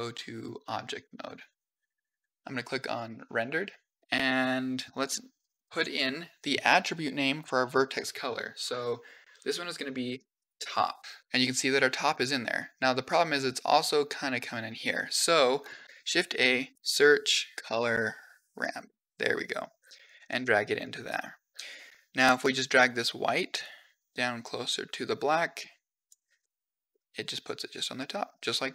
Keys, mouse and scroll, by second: 2.9 click, 4.0 middle click, 4.8 click, 11.2 middle drag, 12.4-12.9 middle drag, 15.5 click, 15.8 shift+a, 16.7 Up, 16.7 Up, 17.8 r, 20.7 click, 21.4 middle click, 22.6 click, 23.4-25.9 drag, 26.2-26.7 middle drag, 27.8-28.5 middle drag.